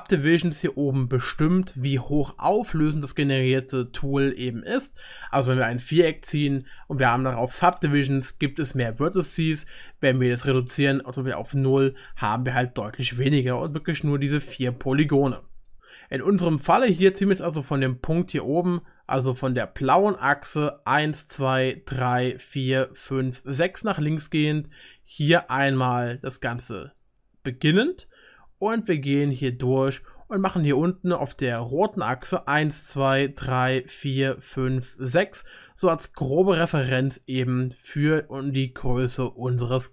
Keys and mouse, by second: 7.4-10.3 drag, 7.4-10.3 middle drag, 7.4-10.3 right drag, 10.6-16.0 drag, 10.6-16.0 middle drag, 10.6-16.0 right drag, 21.3-38.8 middle drag, 25.4-38.8 drag, 25.4-38.8 right drag.